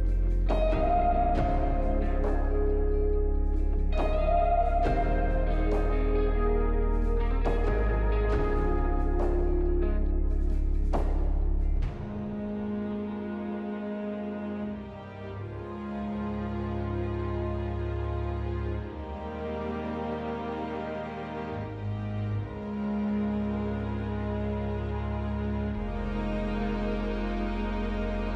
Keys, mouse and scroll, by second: 3.7 double click, 7.1-10.0 scroll up 1, 13.5 double click, 13.9 double click, 24.7 middle click, 25.6 middle click, 25.9 ctrl+a, 27.0 Delete.